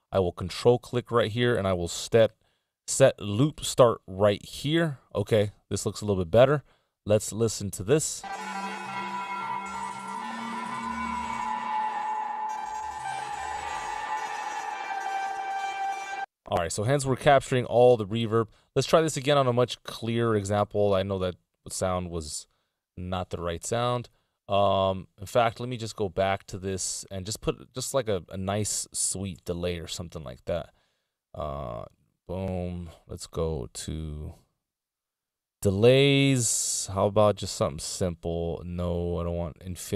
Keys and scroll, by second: 15.0 Return, 18.5 x, 20.8 z, 26.2 BackSpace.